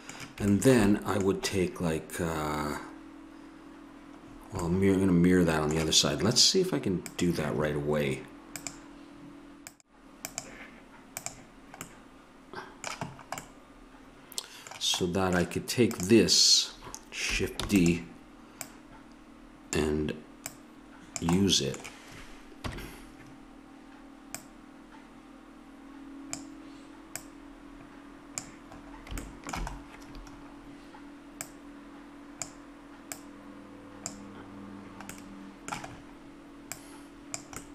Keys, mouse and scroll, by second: 0.5 middle click, 4.2 middle click, 5.7-7.0 middle drag, 7.0-12.3 drag, 11.9 middle click, 15.9-17.6 drag, 17.6 shift+d, 21.4 click, 22.6 KP_1, 25.8 click, 27.2-28.7 drag, 28.7 middle click, 31.4-34.9 drag, 36.7-37.7 drag.